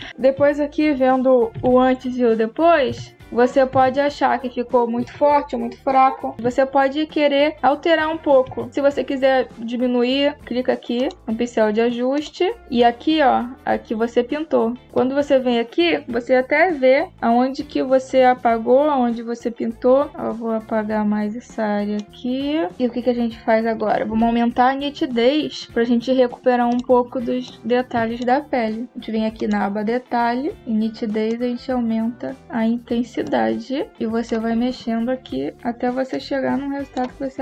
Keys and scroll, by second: 1.4 \, 2.7 \, 6.3 \, 8.3 \.